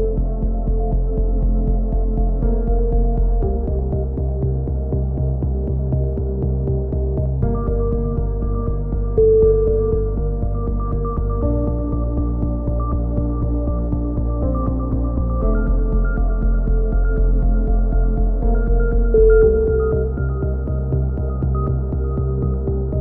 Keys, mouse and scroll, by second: 1.8-3.1 drag, 2.6 ctrl+KP_1, 3.1 middle click, 3.6 click, 4.5 click, 6.3 a, 6.6 middle click, 7.2 click, 10.6-12.2 middle drag, 13.9 click, 15.3-18.6 middle drag, 18.6-19.6 drag, 19.6 right click, 19.7 a, 20.3-21.6 right drag, 21.5 click.